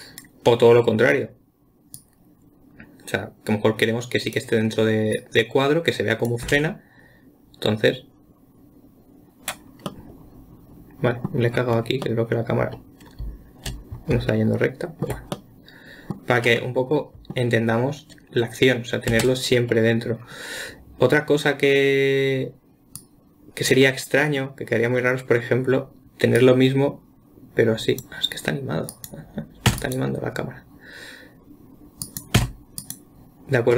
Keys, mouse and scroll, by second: 2.4 click, 5.6 click, 6.9 space, 10.3-12.1 middle drag, 12.1-12.4 scroll down 2, 12.4-15.5 middle drag, 15.8-19.6 middle drag, 19.6 space, 23.4-24.6 drag, 24.6-26.8 middle drag, 26.8 click, 29.3 click, 30.1 x, 32.4 click, 32.8 x.